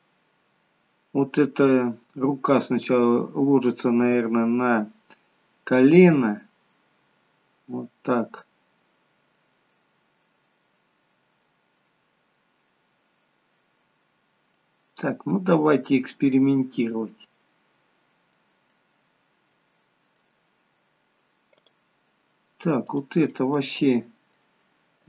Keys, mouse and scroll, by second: 2.1-2.7 scroll up 2, 2.7-3.9 scroll down 1, 3.9 middle click, 14.6 middle click, 18.8 middle click, 21.7 click, 22.9 click, 23.4 middle click.